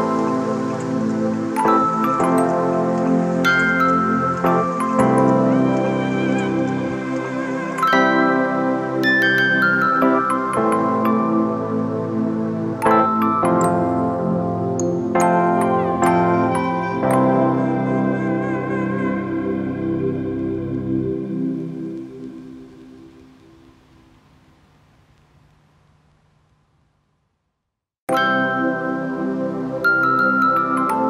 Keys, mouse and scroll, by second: 6.1 alt+shift+click, 9.3 alt+shift+click, 12.4 alt+shift+click, 15.5 right click, 20.7 alt+shift+click, 22.0 ctrl+click, 23.6 ctrl+click.